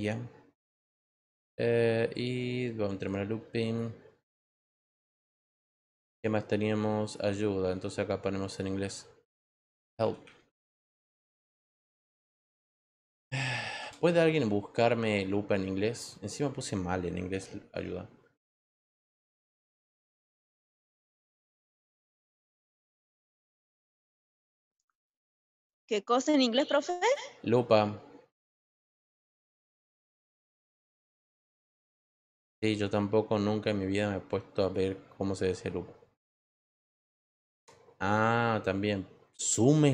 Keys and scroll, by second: 9.2-10.7 typing, 17.2 h, 17.7 e, 18.3 a, 18.7 l, 22.7 BackSpace, 22.9 BackSpace, 23.6 l, 24.0 p.